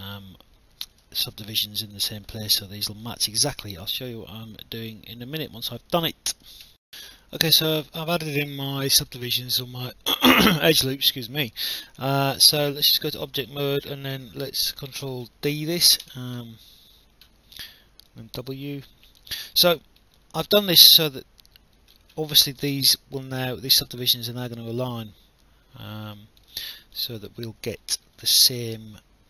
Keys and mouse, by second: 1.2 alt+click, 3.2 alt+click, 6.7 alt+F9, 6.9 alt+click, 7.6 alt+middle click, 8.1 alt+click, 9.1 alt+middle click, 12.8 right click, 15.0 ctrl+d, 17.0 w, 18.1 click, 19.7 alt+middle click, 20.2 alt+click, 23.5 click, 26.6 alt+click, 27.8 alt+middle click.